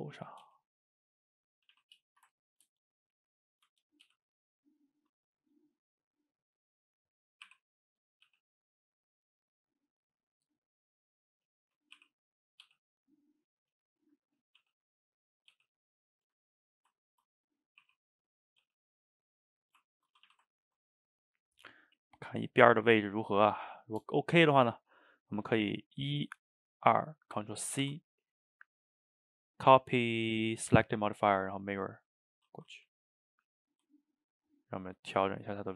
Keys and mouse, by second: 1.2-1.6 middle drag, 1.6 a, 1.8 a, 2.2 shift+right click, 2.4-3.1 ctrl+middle drag, 3.1 click, 3.3-4.1 middle drag, 4.1 g, 5.8-7.5 middle drag, 7.5 r, 8.3 g, 8.9-12.0 middle drag, 12.0 r, 12.7 g, 13.9-14.7 shift+middle drag, 14.7 g, 15.6 g, 16.2-17.8 middle drag, 17.8 r, 18.6 g, 19.5 click, 19.9 ctrl+middle click, 20.2 a, 20.3 a, 20.5-22.7 ctrl+middle drag, 22.7 drag, 23.0-23.5 middle drag, 23.5 shift+right click, 23.8-26.5 ctrl+shift+middle drag, 26.5 shift+click, 27.8 ctrl+c, 32.8 a, 33.0-34.9 middle drag, 34.9 click, 35.1-35.7 middle drag.